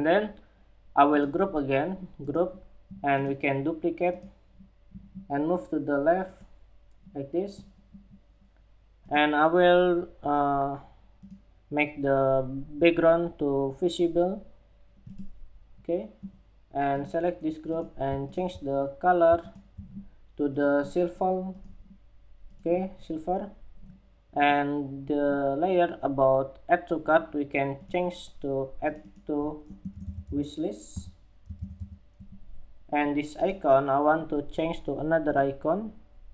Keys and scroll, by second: 31.7 Escape.